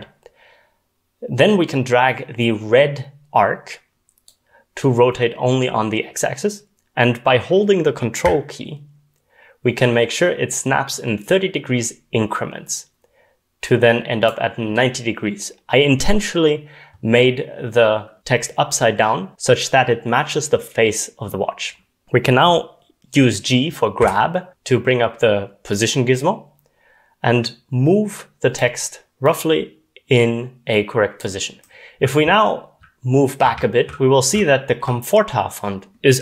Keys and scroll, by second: 24.0 g, 32.2-35.1 typing.